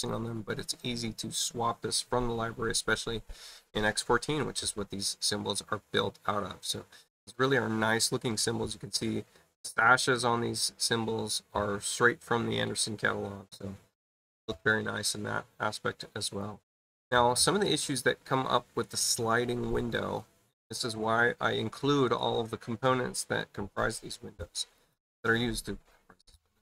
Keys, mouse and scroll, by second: 16.1 click, 24.7 click.